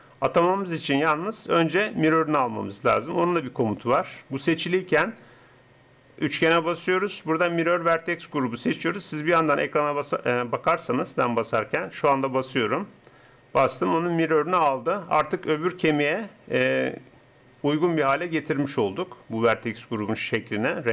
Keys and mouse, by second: 1.8-8.2 drag.